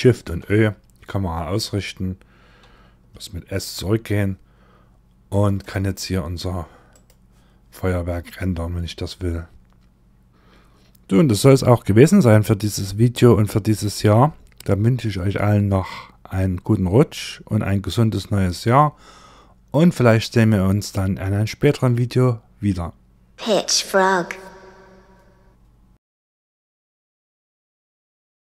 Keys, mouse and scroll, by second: 5.1 s, 7.7 click.